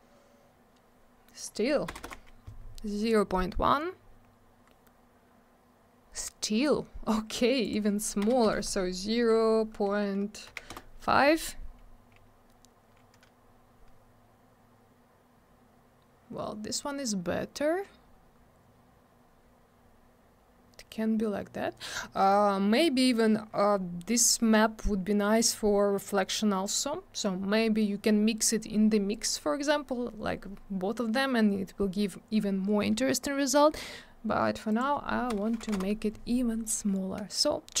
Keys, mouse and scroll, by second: 1.4 click, 1.5 click, 1.9 BackSpace, 2.0 1, 2.1 Return, 4.7-5.9 scroll up 1, 5.9-7.0 scroll down 1, 7.6 click, 7.7 click, 8.2 BackSpace, 8.5 0, 10.7 Return, 13.5-14.7 scroll up 1, 15.8-16.8 scroll down 1, 16.8 scroll up 1, 17.7 scroll down 1, 19.2-20.5 scroll up 1, 20.5-21.4 scroll down 1, 34.7 click, 34.8 click, 35.3 BackSpace, 35.6 3, 35.8 Return, 37.6 scroll up 1.